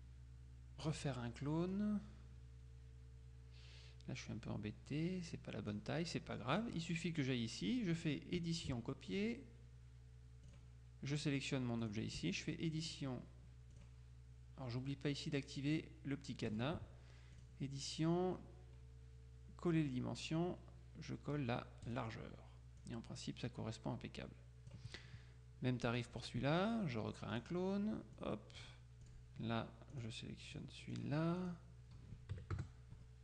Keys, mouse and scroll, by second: 0.9 click, 1.9-6.3 drag, 6.6 click, 9.3 click, 10.6 click, 11.9 click, 12.9 click, 13.9 click, 16.6 click, 17.5 click, 21.9 click, 22.9-25.3 drag, 26.1 click, 27.4 click, 28.3-29.7 drag, 30.0 click, 31.0-32.1 drag, 32.4 KP_Subtract, 32.6 KP_Add.